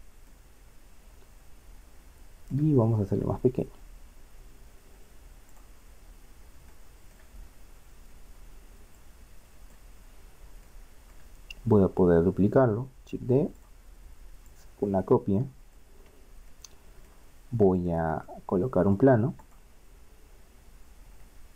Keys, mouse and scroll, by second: 0.3-2.3 middle drag, 3.5 s, 6.1 middle click, 9.2 click, 13.0 shift+d, 17.7 click, 18.1-21.0 middle drag, 21.1 shift+a.